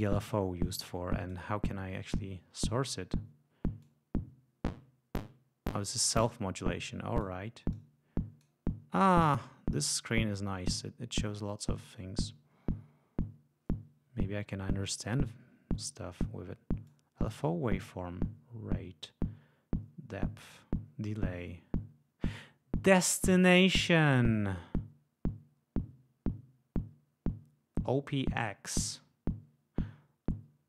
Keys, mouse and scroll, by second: 0.6 click, 3.8-7.4 drag, 7.8 click, 16.9 click, 23.8-30.6 drag.